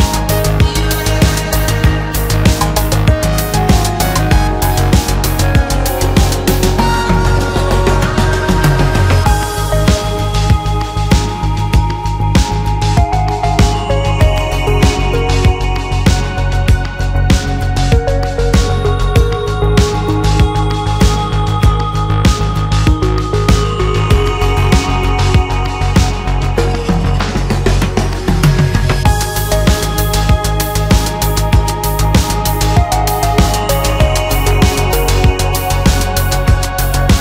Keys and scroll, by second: 2.9 Return, 7.2 Escape, 8.1 Delete, 8.6 F3, 10.2 Return, 10.4 Escape, 10.6 alt+a, 12.1 Escape, 15.9 Return, 16.4 F3, 20.3 Return, 21.7 F3, 22.4 Return, 23.7 F3, 27.4 F3, 29.0 alt+a, 35.2 Escape.